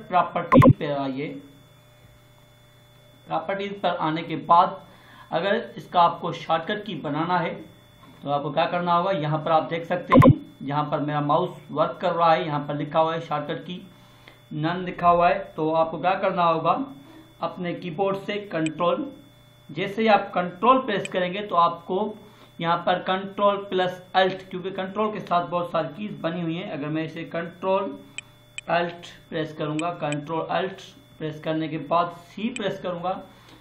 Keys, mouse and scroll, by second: 0.4 click, 10.0 click, 18.8 ctrl+Num_Lock, 18.8 click, 28.0 ctrl+Num_Lock, 32.4 ctrl+alt+c.